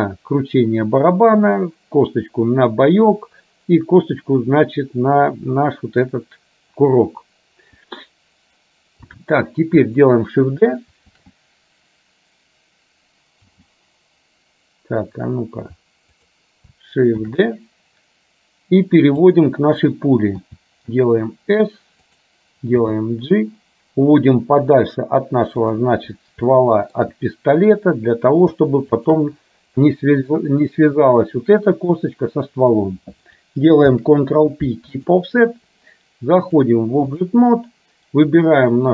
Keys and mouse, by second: 9.2 click, 11.1 shift+g, 13.6 g, 17.3 shift+d, 20.5 s, 22.8 g, 26.6 shift+middle click, 29.1 shift+click, 34.0 ctrl+p, 36.6 click, 38.3 click.